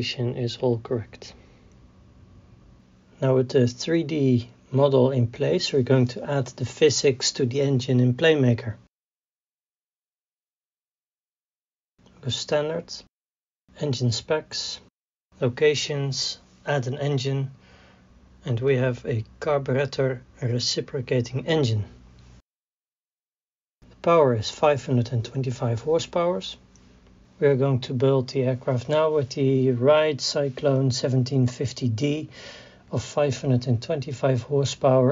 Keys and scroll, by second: 0.9 a, 1.0 w, 1.6 s, 1.7 d, 2.8 alt+F9, 25.2 KP_5, 25.5 KP_2, 25.7 KP_5.